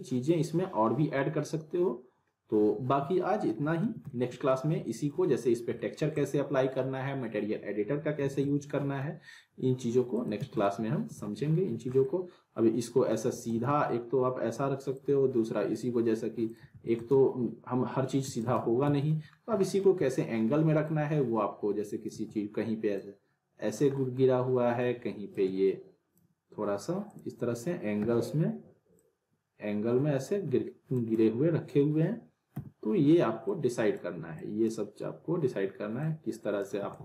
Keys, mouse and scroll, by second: 3.5 middle click, 3.8 z, 4.1-4.7 alt+middle click, 4.7 scroll up 1, 4.9 alt+middle click, 5.5 scroll down 1, 5.8 alt+middle click, 6.2 click, 8.2 z, 8.4-9.1 alt+middle drag, 10.1 click, 10.4 z, 10.6-11.2 middle click, 11.1 w, 11.5 scroll down 1, 12.0-13.3 alt+middle click, 13.3 alt+w, 13.4 alt+right click, 13.5 alt+w, 14.1 scroll up 1, 14.9-15.9 shift+drag, 16.7 alt+w, 17.0 alt+right click, 18.2 alt+w, 18.4 alt+right click, 18.8 z, 19.3 scroll down 1, 19.6 middle click, 19.9 e, 20.8-22.1 click, 22.1 w, 22.9-23.9 click, 24.0 middle click, 25.3-26.3 drag, 28.0 e, 29.0-30.5 drag, 32.5 w, 33.4-34.0 drag, 36.8 w, 36.9 right click.